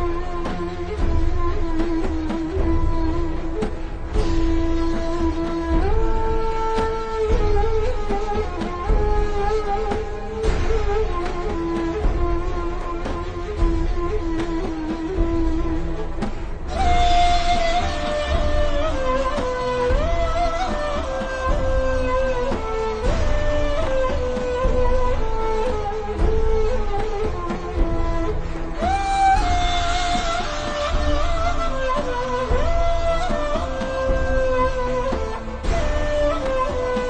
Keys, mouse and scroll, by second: 2.1-4.0 typing, 3.8 click, 4.0 alt+shift+scroll down 1, 4.6 alt+shift+scroll up 1, 4.9 click, 7.0 g, 7.2 click, 7.6-8.4 scroll down 1, 8.4 click, 9.2 click, 9.5 click, 11.1 click, 11.2 alt+shift+scroll up 1, 12.3 click, 14.2-14.7 alt+shift+scroll up 4, 14.5 alt+click, 18.4 click, 20.1 BackSpace, 20.3 click, 22.0 BackSpace, 22.5 click, 22.7 BackSpace, 23.0 click, 23.2 scroll up 1, 23.5 click, 25.0 BackSpace, 25.3 click, 25.8-26.1 alt+shift+scroll down 2, 26.1 scroll up 1, 26.3 z, 26.8 click, 28.3-28.7 alt+shift+scroll down 2, 28.7 click, 29.5 scroll down 1, 30.4 click, 36.3-37.0 scroll down 5.